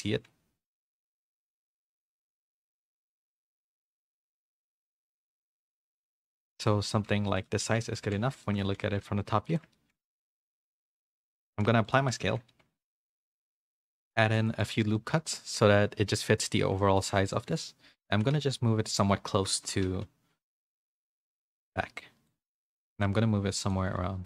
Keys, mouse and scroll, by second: 0.1 KP_7, 1.4 shift+middle click, 1.4 z, 2.0 g, 3.6 g, 4.8 s, 5.8 g, 7.1 s, 7.6 middle click, 8.0 z, 8.4 shift+middle click, 8.7 g, 9.8 shift+middle click, 10.2 middle click, 10.5 g, 11.1 middle click, 11.4 ctrl+a, 12.1 Tab, 12.5 ctrl+r, 14.4 ctrl+r, 14.9 middle click, 15.8 a, 16.0 middle click, 16.8 middle click, 17.3 middle click, 17.6 middle click, 18.1 g, 19.7 KP_1, 19.8 KP_3, 21.1 r, 22.5 g, 23.0 r, 23.8 g.